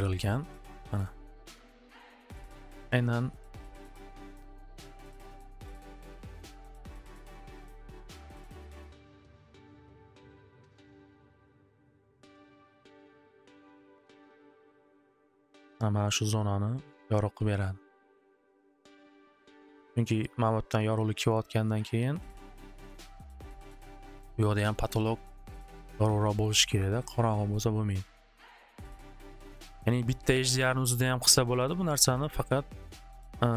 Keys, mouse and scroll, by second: 0.5 click, 1.1 click, 1.3 middle click, 4.0 click, 4.5 click, 8.8 click, 10.0 click, 12.9 click, 17.1 click, 21.3 click, 22.1 click, 24.4 click, 24.7 right click, 26.6 click, 27.0 click, 30.1-32.2 drag.